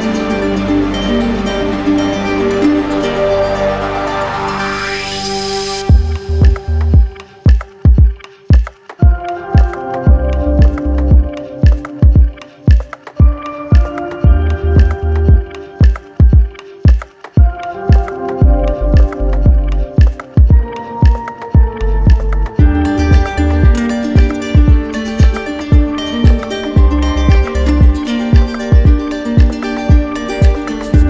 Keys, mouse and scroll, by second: 4.9 click, 6.2 q, 8.2 click, 9.6 click, 9.9 ctrl+click, 10.6 click, 11.8 ctrl+click, 11.8 w, 14.6 click, 15.6 alt+click, 18.2 click, 18.5 shift+click, 20.1 shift+click, 20.5 alt+click, 22.5 q, 25.4 click, 26.6 right click, 29.4 click, 30.6 click.